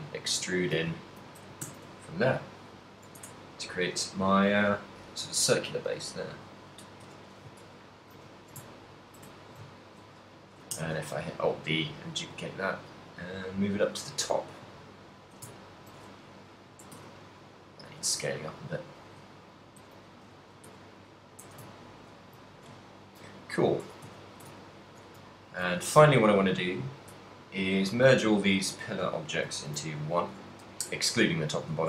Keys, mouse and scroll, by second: 0.2 alt+right click, 0.7 e, 1.2 right click, 2.1 s, 2.5 click, 2.8 middle click, 3.2 Tab, 3.7 right click, 4.7 right click, 6.2 click, 7.1 KP_1, 7.7 ctrl+middle click, 8.5 shift+middle click, 8.7 ctrl+middle click, 9.3 shift+middle click, 9.8 ctrl+middle click, 10.6 alt+d, 14.1 shift+click, 14.4 a, 15.1 shift+middle click, 15.6 ctrl+middle click, 16.3 right click, 16.7 s, 18.1 click, 18.1 g, 19.2 shift+click, 19.5 right click, 19.7 g, 20.3 shift+click, 20.5 g, 21.4 shift+click, 21.7 a, 22.1 ctrl+middle click, 22.5 shift+middle click, 23.0 ctrl+middle click, 23.4 middle click, 23.9-25.9 typing, 27.0 right click, 27.2 shift+right click, 27.6 shift+right click, 28.0 shift+right click, 28.4 shift+right click, 28.7 shift+right click, 29.9 ctrl+j, 31.7 right click, 31.7 g.